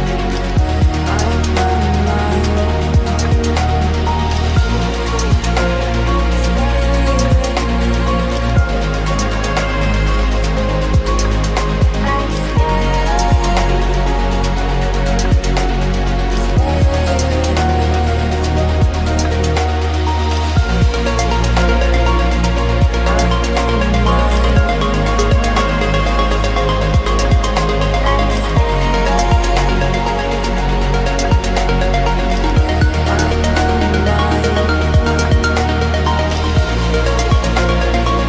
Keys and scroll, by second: 28.8 Delete, 30.7 Delete.